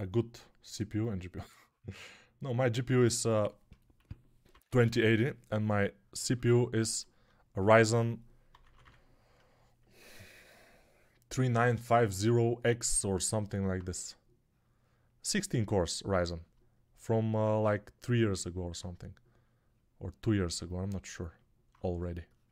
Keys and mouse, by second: 3.8-4.8 typing, 8.4 [, 8.6 [, 8.7 [.